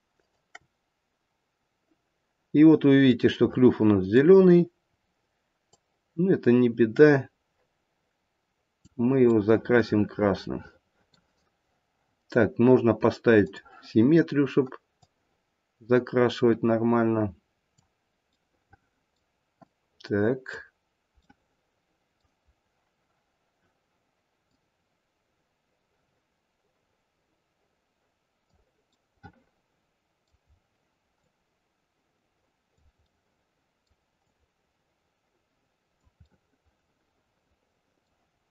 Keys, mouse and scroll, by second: 0.2 shift+click, 2.7-3.1 scroll up 3, 3.1 middle click, 3.2 middle click, 3.6 middle click, 4.0 middle click, 4.3-4.9 scroll down 2, 4.9-5.7 scroll down 1, 5.7 click, 9.3 middle click, 10.1 middle click, 10.8 middle click, 13.5 click, 13.9-14.4 scroll up 2, 15.1 click, 18.3 middle click, 18.9 middle click, 19.6 click, 21.2 middle click, 22.4-24.2 scroll up 2, 24.5 click, 28.9 middle click, 29.4 middle click, 29.7 middle click, 30.0 middle click, 30.4-31.3 scroll down 1, 31.3 click, 33.1 middle click, 34.3 click, 36.3 middle click, 36.4 middle click, 36.8 middle click, 37.0 middle click, 37.7 middle click, 38.2 middle click, 38.2-38.5 scroll down 1.